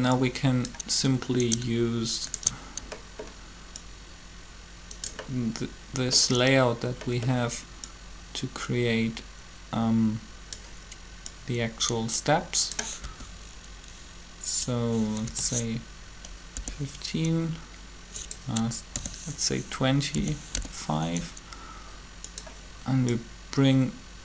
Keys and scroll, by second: 13.0 r, 15.2 1, 16.5 5, 18.7 r, 20.0-20.5 typing.